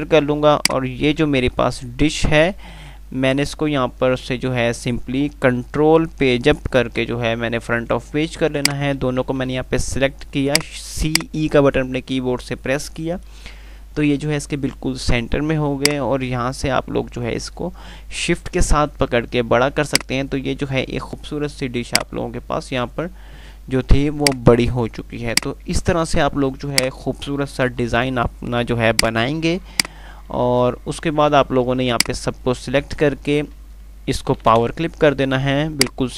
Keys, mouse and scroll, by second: 0.0-0.3 typing, 0.8-1.5 alt+click, 1.5-3.6 typing, 8.8 click, 9.3-10.2 typing, 10.7 click, 16.0-18.3 shift+click, 20.3-21.0 shift+drag, 27.0 right click, 27.9 F3, 29.3-34.6 drag, 32.4-32.7 drag, 36.0-36.1 drag.